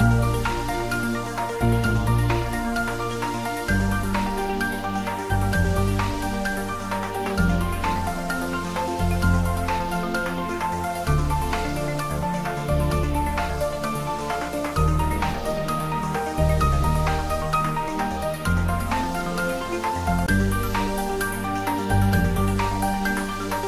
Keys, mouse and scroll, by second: 1.8 g, 1.9 click, 2.6 scroll down 1, 3.8 click, 4.7 shift+click, 5.6 g, 6.0 z, 8.2 click, 8.7-9.6 scroll down 1, 9.6-11.3 middle drag, 11.3 click, 12.2 middle click, 13.0-13.5 scroll up 1, 13.5-15.1 middle drag, 15.1 s, 16.0 click, 16.2 s, 16.6 z, 18.0 click, 18.8 g, 22.7 click, 23.1-23.6 middle drag.